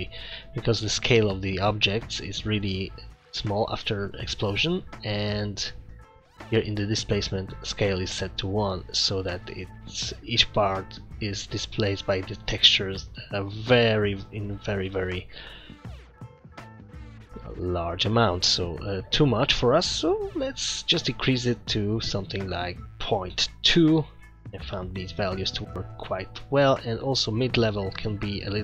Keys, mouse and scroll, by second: 0.1 scroll down 4, 6.5-7.0 scroll up 3, 7.0 middle click, 7.4-8.1 scroll up 4, 8.8-9.2 scroll up 3, 12.7-13.2 scroll down 10, 13.8 middle click, 15.5 scroll up 1, 16.6 scroll down 2, 17.7 scroll up 1, 18.6 middle click, 19.3-19.6 scroll up 3, 20.0 middle click, 20.3-21.0 scroll up 3, 21.0 click, 26.5 click.